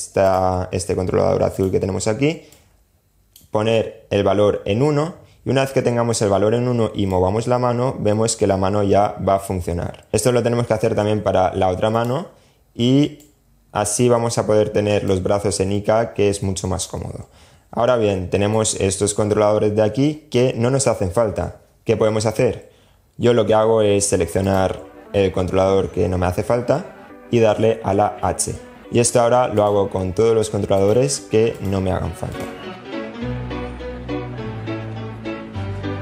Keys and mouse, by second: 0.7 click, 1.7 click, 6.3-9.5 drag, 9.9 drag, 11.1 click, 12.4 click, 14.2-16.0 drag, 17.0-17.7 middle drag, 23.6 click, 27.4 h, 29.3 h, 30.3-33.7 typing, 30.7 click, 32.7 click, 32.9 click, 33.1 click, 33.9 click, 34.0-34.4 shift+drag, 34.7 super+z, 34.7-36.0 typing, 35.5 shift+drag.